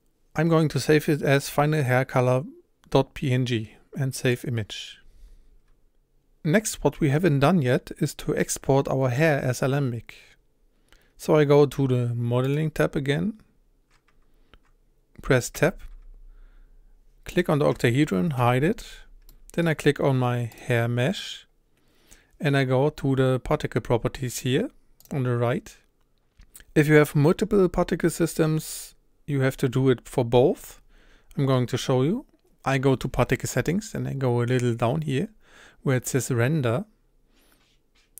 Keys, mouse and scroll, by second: 5.7-6.8 scroll up 1, 6.8-11.2 scroll up 1, 12.5-14.6 drag, 15.8 Tab, 17.4 click, 18.4 h, 19.3-19.7 middle drag, 19.7-20.6 scroll up 2, 20.6 click.